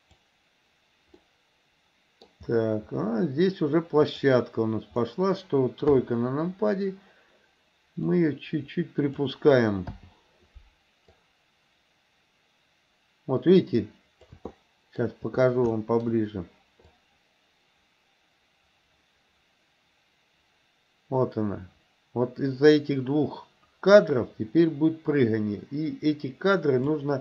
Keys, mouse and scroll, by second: 1.3-2.3 middle drag, 4.1 click, 5.9 KP_3, 8.2-9.3 drag, 10.0 i, 11.2-14.4 drag, 14.6-15.1 shift+middle drag, 15.8-16.1 shift+middle drag, 17.0-27.1 drag.